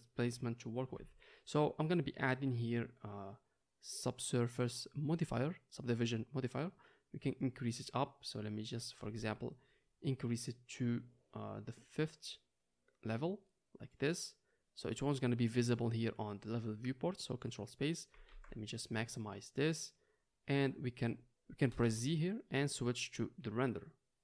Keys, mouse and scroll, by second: 11.2-24.2 drag, 11.2 z, 19.3 ctrl+space, 21.4 z.